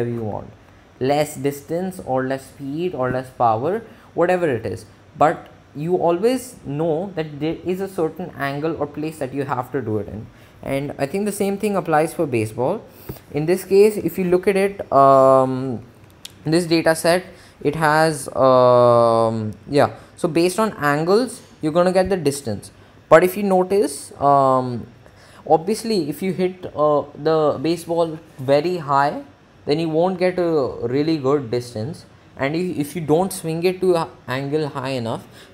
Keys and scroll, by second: 14.8 Down, 17.8 Up, 19.9 Down, 22.1 Up.